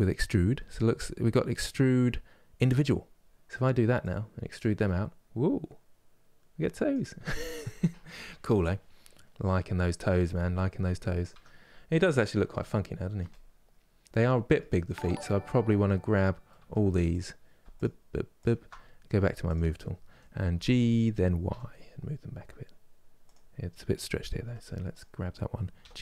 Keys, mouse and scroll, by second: 2.5-3.9 drag, 8.3-11.0 middle drag, 11.0 Tab, 11.3-11.7 scroll down 1, 11.7-12.2 scroll up 1, 13.0-14.3 middle drag, 14.3 Tab, 14.5-16.8 middle drag, 16.8 alt+click, 17.5 alt+shift+click, 18.1 alt+shift+click, 19.2-20.4 drag, 20.4 g, 24.6 click, 25.6 g.